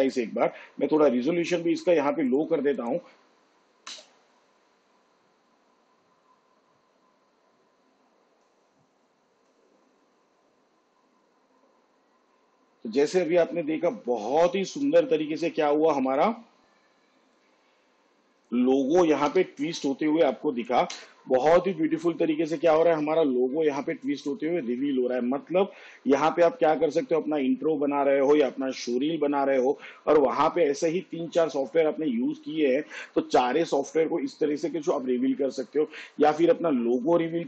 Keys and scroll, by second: 4.0 space, 9.5 shift+/, 15.0 space, 19.4 n, 21.0 space.